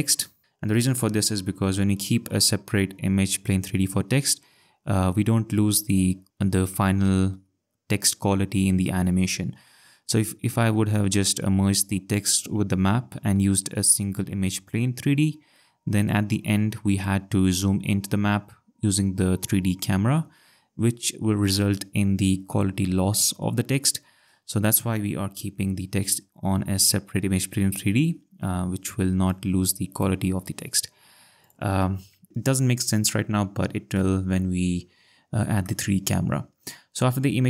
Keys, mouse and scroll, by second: 29.3 click, 31.4 click, 35.6 click, 36.3 click.